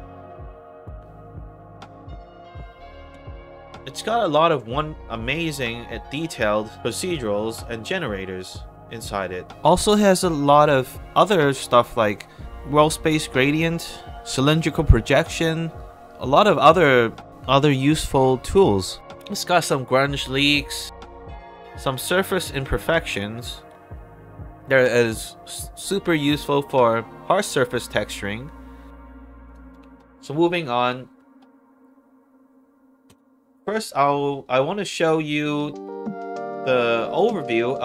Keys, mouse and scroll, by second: 0.5 scroll down 2, 1.9 click, 3.1 space, 3.8 right click, 7.4 click, 9.4 click, 12.5 space, 16.4-17.9 drag, 18.9 click, 20.2 middle click, 20.2 scroll down 2, 21.8-22.2 scroll down 1, 28.6-28.9 scroll down 2, 29.4 click, 30.2 alt+click, 30.7 alt+middle click, 33.0 space, 34.4 click, 35.0 click, 37.0 click.